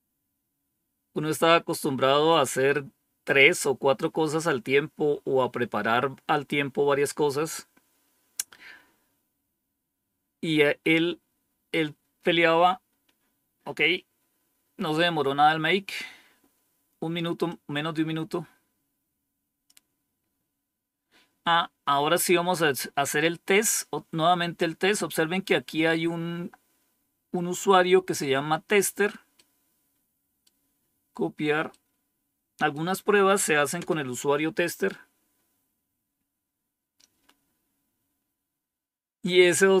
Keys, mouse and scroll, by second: 17.4-19.6 drag, 29.2-30.3 right drag, 31.6 right click, 33.7 Return.